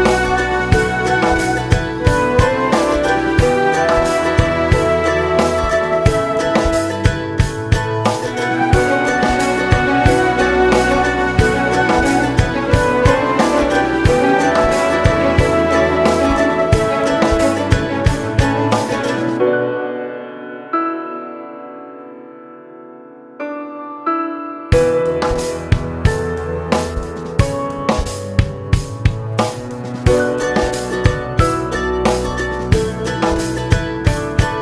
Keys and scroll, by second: 19.2 ctrl+z.